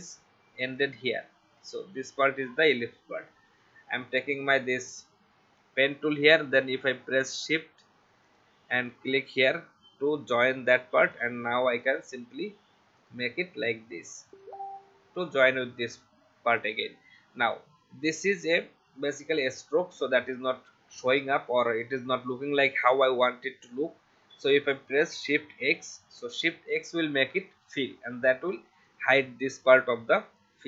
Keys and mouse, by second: 0.7 click, 4.4 click, 8.3 shift+click, 11.1 click, 14.3 click, 16.0 v, 16.6 click, 25.6 shift+x, 28.8 click.